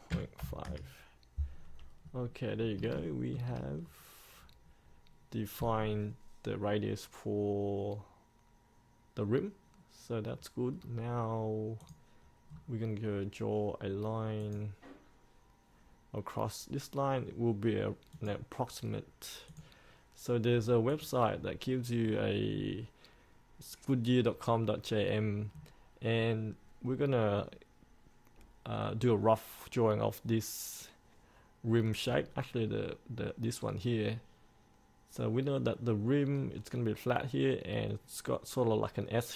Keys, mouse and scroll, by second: 0.3 KP_Decimal, 0.6 KP_5, 2.2-2.6 scroll down 1, 2.6-2.9 scroll up 1, 3.1 shift+middle click, 4.0-11.0 scroll down 1, 11.0-12.0 scroll up 1, 12.0 click, 12.7-14.6 scroll down 1, 14.6 click, 22.2-22.7 scroll down 1, 22.7-25.7 scroll up 1, 25.7-32.2 scroll down 1, 32.2-39.3 scroll up 1.